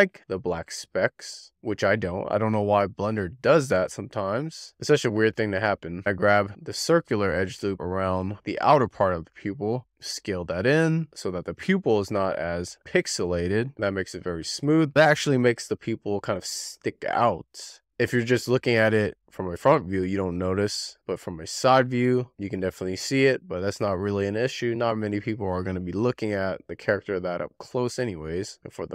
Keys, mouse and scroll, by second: 0.3 click, 0.5 scroll down 6, 0.7 shift+middle click, 1.2 click, 1.6 scroll down 2, 1.8 shift+middle click, 2.1-2.6 scroll up 4, 2.6 click, 2.9 shift+middle click, 3.3-4.8 drag, 4.8 scroll down 1, 5.1 scroll up 6, 5.2-5.5 scroll down 4, 5.7 scroll up 1, 6.0 click, 7.6 alt+shift+click, 9.6 click, 18.6 w, 19.7 shift+middle click, 20.7 scroll down 1, 20.9 middle click, 21.3 click, 22.1 scroll down 2, 22.2 shift+middle click, 22.8 e, 23.2 r, 23.3-23.7 scroll up 4, 24.1 click, 25.6 scroll down 4, 25.8 middle click, 26.6 w, 26.9-27.3 scroll down 2, 27.5 Tab, 27.9 shift+middle click, 28.3 alt+middle click, 28.4 click.